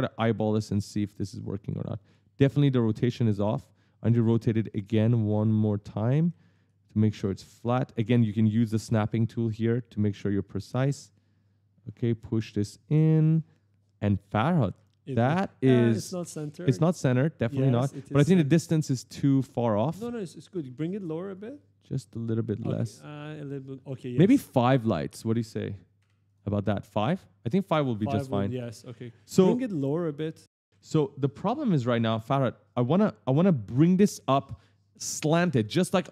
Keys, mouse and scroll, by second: 0.5 click, 2.2 click, 3.3 w, 4.0 a, 4.9 click, 6.0 right click, 6.1 e, 9.8 click, 12.9 right click, 16.3 click, 17.7 right click, 17.9 a, 18.2 d, 19.6 a, 21.1 click, 25.0 click, 26.1 click, 26.5 right click, 29.4-30.9 typing, 31.6 click.